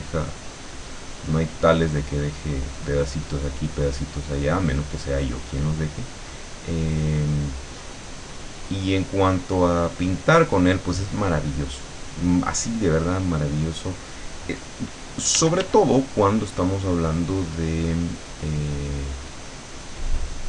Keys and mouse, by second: 2.1-3.1 drag, 3.2 click, 4.4-6.1 drag, 6.2-7.8 drag, 8.3-9.7 drag, 9.8-11.0 drag, 11.3 click, 13.3 click, 15.4 d, 16.0 click, 17.0-18.3 drag, 19.4-20.4 drag.